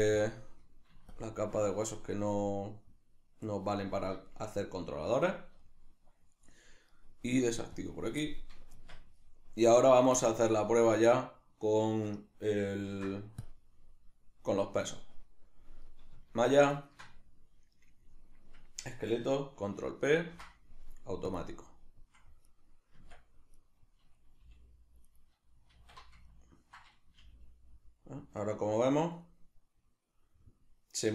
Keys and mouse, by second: 0.2 drag, 1.1-1.9 shift+drag, 1.9-7.8 middle drag, 7.8 click, 8.3 middle drag, 8.7 Tab, 9.7 right click, 10.3-16.7 shift+middle drag, 12.9 ctrl+s, 16.7 shift+right click, 20.1 ctrl+p, 22.4 right click, 23.0 Tab, 23.6 right click, 24.4 g, 25.2 right click, 25.8 alt+q, 26.3-31.1 ctrl+middle drag, 27.2 g.